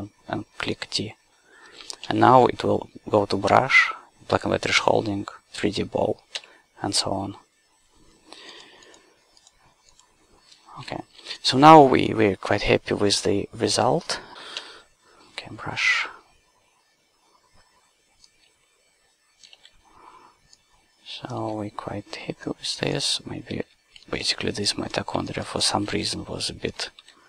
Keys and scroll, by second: 2.0 d, 4.8 d, 11.0 q, 14.6 d, 19.6 s, 21.4 s, 23.7 c, 24.0 w, 25.9 s.